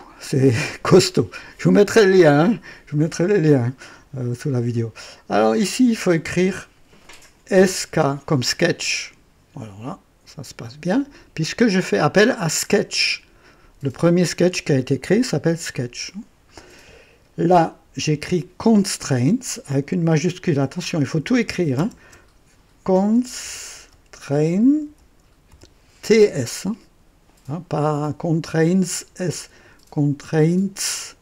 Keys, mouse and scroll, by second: 7.3-8.4 typing, 10.9 click, 21.5-26.3 typing.